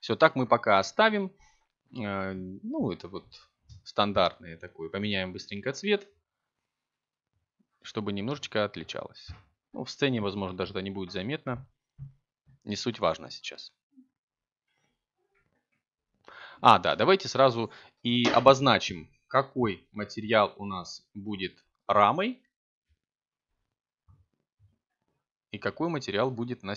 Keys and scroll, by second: 10.2 Tab, 13.1 c, 26.6 Tab.